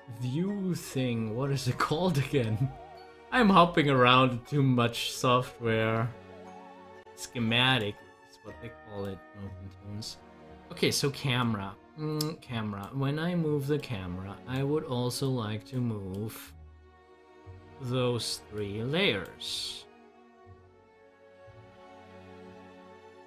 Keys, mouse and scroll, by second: 7.6-23.2 drag.